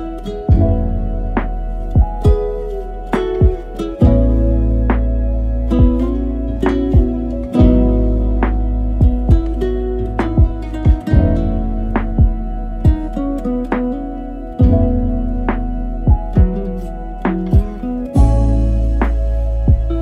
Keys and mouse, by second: 3.2 s, 4.5 shift+middle click, 5.5 g, 9.0 middle click, 9.5 g, 12.0 KP_0, 12.9 a, 13.1 a, 15.2-16.3 drag, 15.2 z.